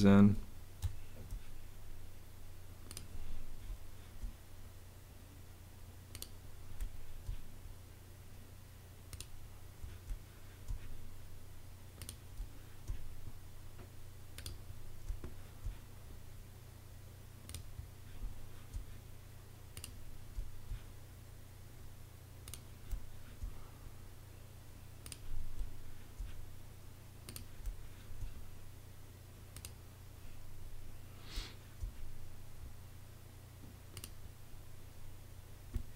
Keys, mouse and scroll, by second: 0.8 space, 3.6 space, 6.7 space, 10.0 space, 12.3 space, 14.9 space, 18.1 space, 20.3 space, 22.8 space, 25.5 space, 27.5 space, 31.2 space, 35.6 space.